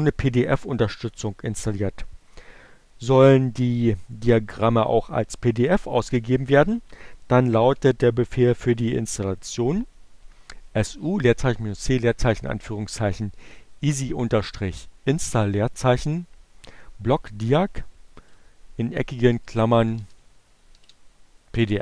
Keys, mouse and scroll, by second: 15.8 BackSpace, 16.3 alt+8, 18.4-19.3 typing, 20.3 alt+9, 21.2 BackSpace.